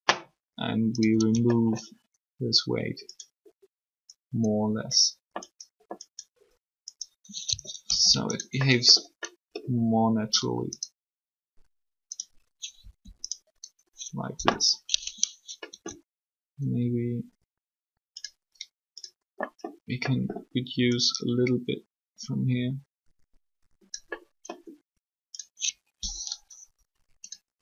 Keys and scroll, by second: 7.9 ctrl+z, 12.8 r.